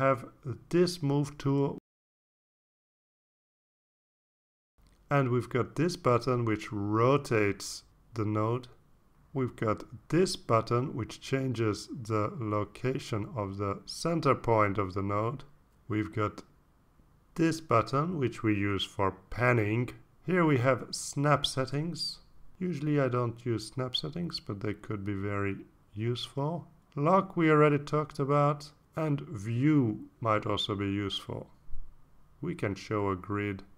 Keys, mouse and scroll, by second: 3.5 click, 4.4-5.4 drag, 6.2 ctrl+z, 7.1 ctrl+z, 8.1 click, 8.8-10.6 drag, 11.0 ctrl+z, 13.3 click, 13.9 click, 14.7 click, 15.6 click, 16.1-17.9 drag, 18.4 ctrl+z, 18.6 ctrl+z, 19.8 ctrl+z, 21.5 click, 22.1-24.0 drag, 24.2 click, 26.3 click, 28.1 click, 29.9 click, 32.5 click, 33.5 click.